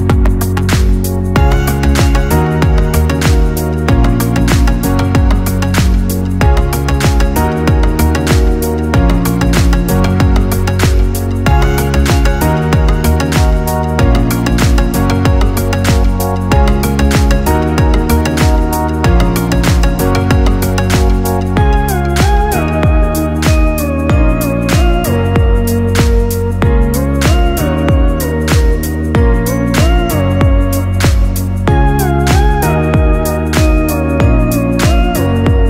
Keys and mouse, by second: 0.5 j, 2.9 click, 4.1 shift+click, 5.3 j, 7.4-10.2 right drag, 10.2-13.6 drag, 14.4 g, 17.8 click, 18.7 g, 21.5 click, 22.4 g, 24.9 click, 25.4 g, 26.9 click, 27.3 g, 28.9 click, 29.4 ctrl+x, 29.9 click, 30.5 g.